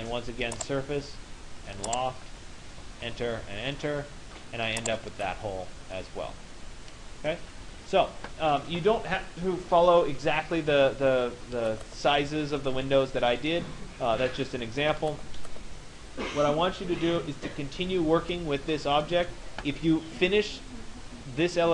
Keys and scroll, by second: 2.7 Return.